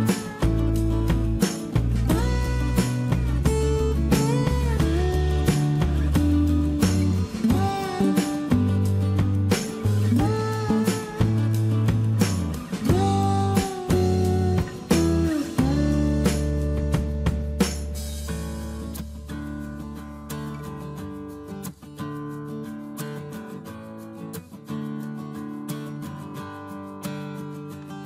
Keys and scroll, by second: 17.2 m, 22.8 space, 24.7 m.